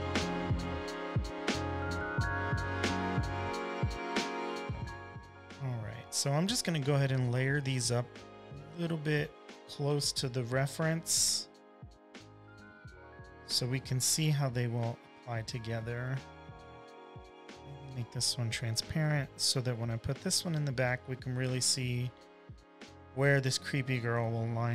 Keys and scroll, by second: 0.5 super+c, 0.7 super+v, 1.2 super+Tab, 1.7 super+`, 2.0 super+`, 2.3 m, 2.9 super+c, 3.2 v, 4.2-6.6 typing, 9.0 super+t, 14.0 v, 16.1 super+t, 19.8 v, 20.3 5, 22.9 v.